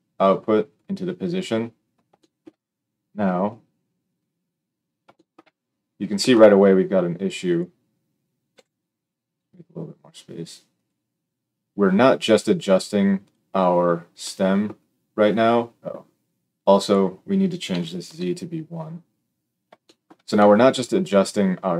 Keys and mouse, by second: 8.5 g, 10.8-13.2 middle drag, 13.2 click, 13.3-16.7 middle drag, 16.7-21.7 drag.